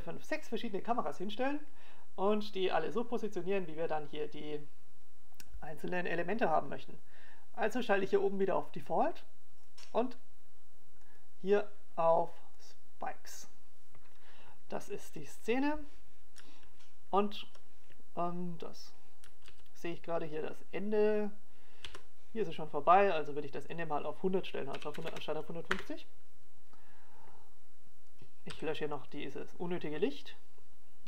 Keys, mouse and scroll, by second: 12.7 click, 21.2 alt+a, 25.4 click, 29.9 right click, 30.4 x.